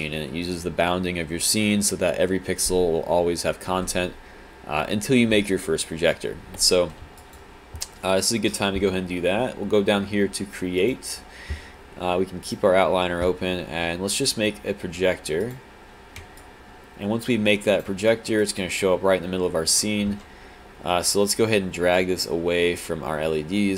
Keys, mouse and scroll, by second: 7.2 alt+click, 16.4 alt+click, 18.1 alt+right click.